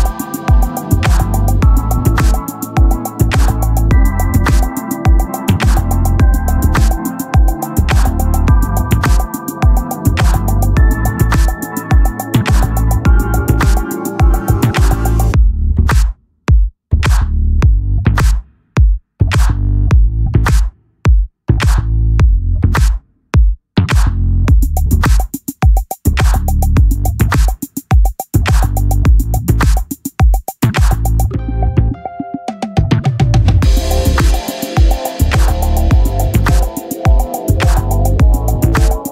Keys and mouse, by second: 0.8 click, 9.8 click, 14.1 click, 18.2 click, 22.2 click, 24.5 click, 33.8 click, 35.5 click.